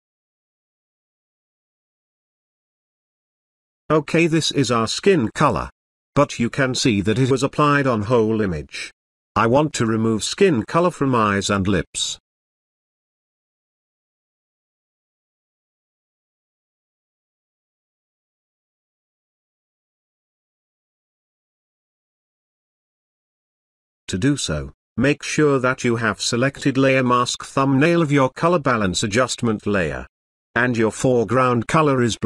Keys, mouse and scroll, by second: 2.1 space, 2.2-3.8 ctrl+drag, 6.6 space, 6.8-9.6 ctrl+drag, 11.1 space, 11.3-13.1 ctrl+drag, 20.5 space, 21.3-23.9 ctrl+drag, 24.5-25.1 ctrl+drag, 29.2 b, 29.7-31.0 drag.